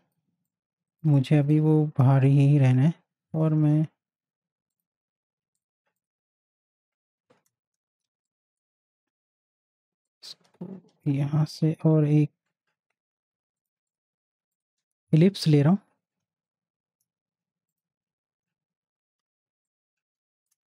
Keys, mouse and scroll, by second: 2.6 l, 4.7 click, 8.0 space, 8.2 click, 8.5 space, 10.1-11.6 drag, 11.6 l, 13.6 click, 15.1 l, 17.9 click, 19.7-20.6 alt+shift+drag.